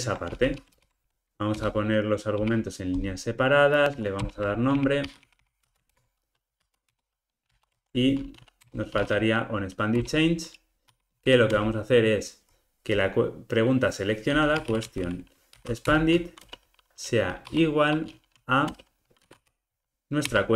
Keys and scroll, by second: 0.7 alt+Return, 10.0 Return, 15.9 Return, 20.3 Return.